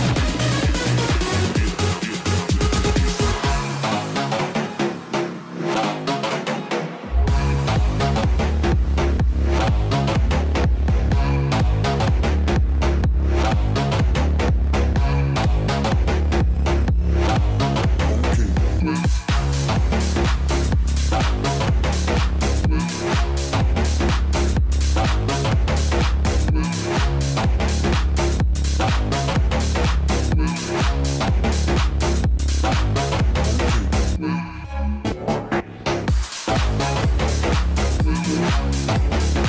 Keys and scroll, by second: 31.1-33.1 typing, 34.5-35.5 typing.